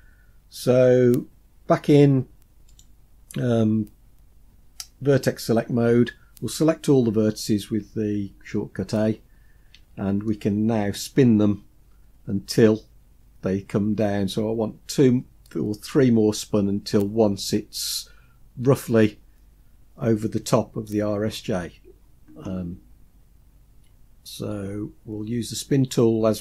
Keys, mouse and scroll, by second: 2.8 click, 7.9 a, 10.4 shift+middle click.